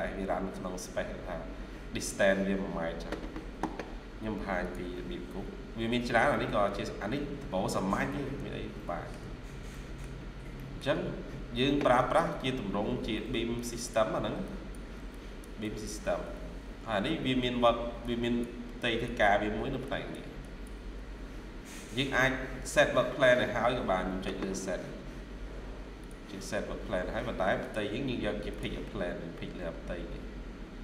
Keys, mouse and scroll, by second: 5.5 scroll down 1, 6.2 middle click, 8.0 middle click, 9.3 scroll down 1, 9.6 middle click, 12.9 ctrl+q, 16.3 Escape, 17.3 ctrl+q, 19.3 ctrl+q, 21.0 Escape, 25.0-25.5 scroll up 1, 28.8 scroll up 1.